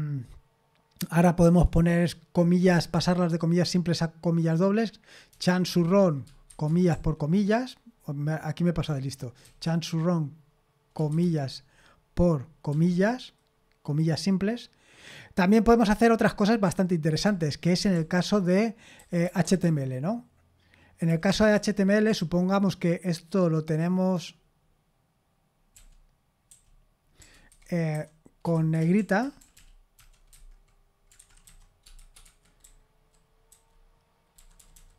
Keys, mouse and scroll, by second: 5.3-6.9 typing, 8.8-11.1 typing, 12.7 typing, 17.1-17.9 typing, 19.0-19.6 typing, 21.1-22.1 typing, 25.7-34.7 typing, 32.2 Escape.